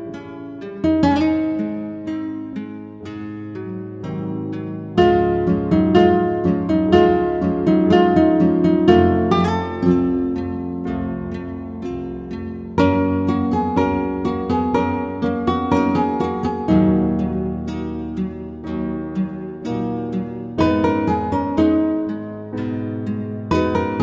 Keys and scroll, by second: 16.7 ctrl+z.